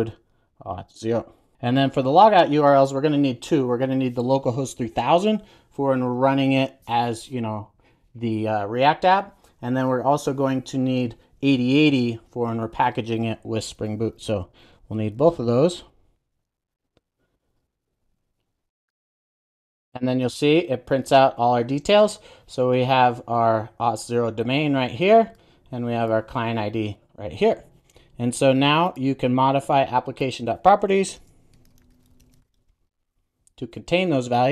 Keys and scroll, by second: 31.0 shift+super+o.